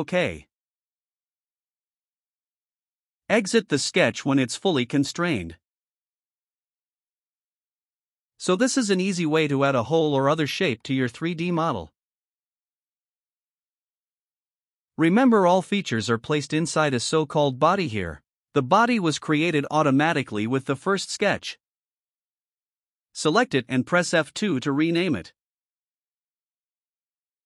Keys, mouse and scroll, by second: 0.5 click, 6.5 click, 17.6 click, 19.2 click, 22.0 click, 24.5 F2, 26.2 BackSpace, 26.4 BackSpace, 26.6 BackSpace.